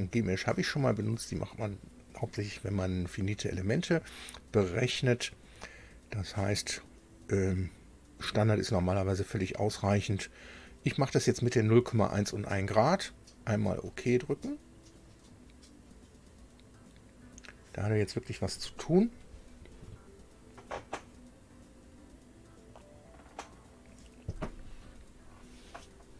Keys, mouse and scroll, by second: 4.7 click, 8.0 click, 13.7 click.